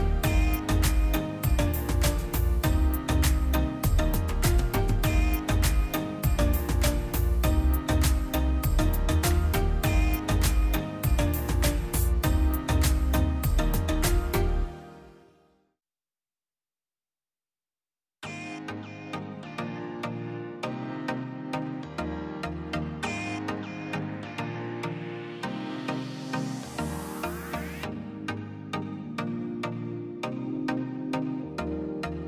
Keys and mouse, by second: 1.0 middle click, 1.3 middle click, 2.1 click, 3.0 middle click, 3.9 middle click, 4.6 click, 5.4 middle click, 5.8 middle drag, 6.1 click, 6.5-7.3 middle drag, 7.3-8.1 drag, 9.5-10.8 middle drag, 11.0-11.8 middle drag, 11.8-12.5 drag, 13.2 click, 14.0 click, 14.4 click, 14.8 middle click, 15.4-17.0 middle drag, 17.0 middle click, 17.7 click, 18.4-19.7 middle drag, 21.2 shift+a, 22.8-25.9 middle drag, 25.9-26.9 drag, 31.3 click, 31.7 click.